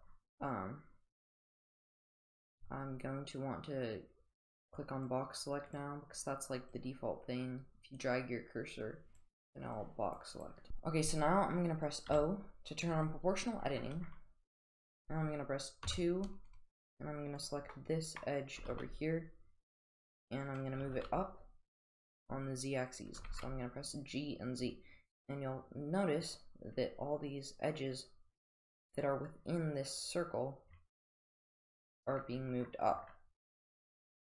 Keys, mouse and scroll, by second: 4.8 click, 5.7 click, 6.8-9.2 drag, 9.8 click, 12.1 o, 15.9 2, 17.4 click, 17.8-18.2 middle drag, 18.6 g, 20.8 g, 23.2 g.